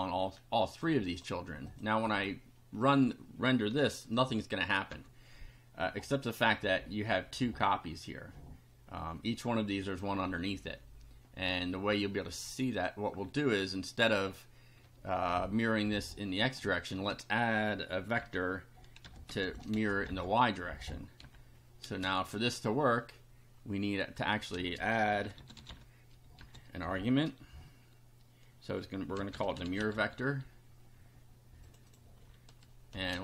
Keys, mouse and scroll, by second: 1.1 click, 1.7 click, 4.9 F5, 11.5 click, 12.7 click, 17.0 space, 18.2-21.9 typing, 24.1 click, 24.6-26.4 typing, 28.9-30.5 typing, 31.7 click, 33.1 ctrl+c.